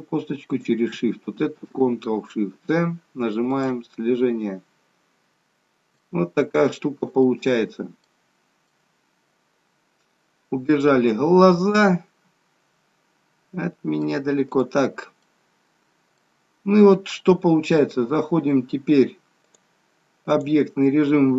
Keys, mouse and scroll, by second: 0.6 shift+click, 2.5 ctrl+shift+c, 3.7 shift+c, 4.8-5.9 scroll up 8, 5.2 shift+middle click, 6.1 shift+middle click, 7.3 middle click, 8.3-8.7 scroll down 3, 8.7 middle click, 14.5 click, 15.3 middle click, 17.1-17.6 scroll up 1, 19.6 click.